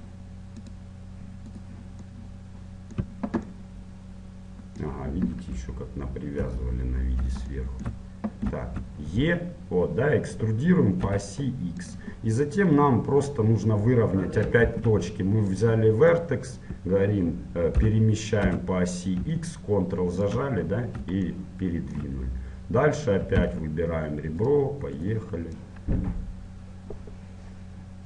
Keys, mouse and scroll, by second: 2.2-5.5 middle drag, 5.5 KP_1, 6.5 KP_7, 7.0-9.5 middle drag, 8.6 e, 12.4-15.2 middle drag, 14.8 ctrl+Tab, 16.2-17.8 right drag, 17.8 g, 20.8 middle click, 21.3-23.6 middle drag, 23.6 ctrl+Tab, 25.1 right click, 25.8-27.0 middle drag, 27.0 click.